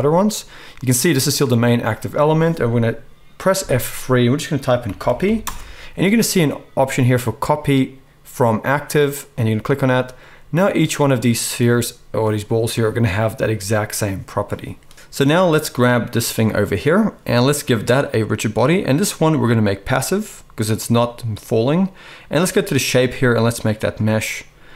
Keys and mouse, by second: 3.6 F3, 10.6-11.3 middle drag, 11.3 click, 11.4-18.0 middle drag, 18.0-24.7 drag.